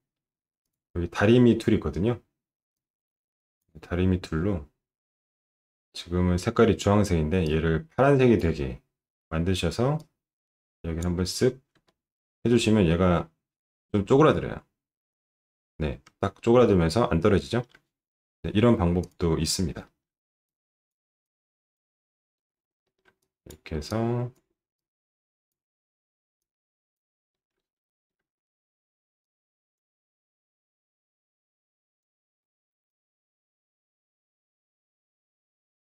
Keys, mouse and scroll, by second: 0.6 click, 2.7 click, 7.4 click, 9.9-11.0 drag, 11.8 alt+middle click, 13.9 space, 16.2-17.6 alt+middle drag, 19.0 click, 19.8 alt+middle click, 20.4 click, 21.2 click, 22.8 alt+middle click, 23.2 click, 23.9 click, 24.7 click, 26.4 click, 27.3 alt+middle click, 27.6 middle click, 27.9 alt+middle click, 29.2 click, 30.4 click, 31.6 click, 32.4 alt+middle click, 32.9 click, 34.1 click, 34.8 click, 35.8 click.